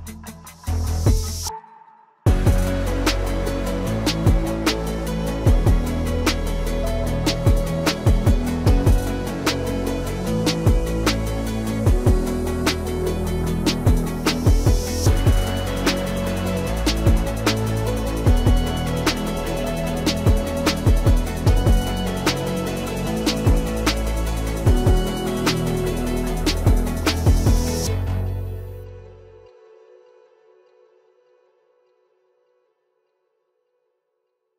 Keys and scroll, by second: 1.3 ctrl+s, 3.7 ctrl+v, 15.5 alt+w, 32.9 alt+w.